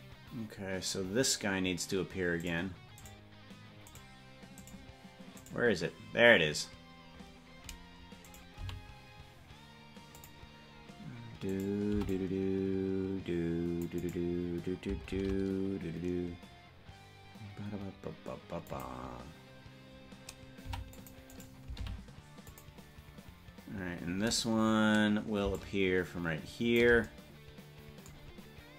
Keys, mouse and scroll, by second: 2.8 right click, 3.4 right click, 4.2 right click, 5.0 right click, 5.8 right click, 7.4-7.8 scroll up 7, 8.4 right click, 8.8 g, 11.8 right click, 12.0 c, 15.2 shift+d, 20.8 c, 22.0 g, 25.6-26.9 shift+drag.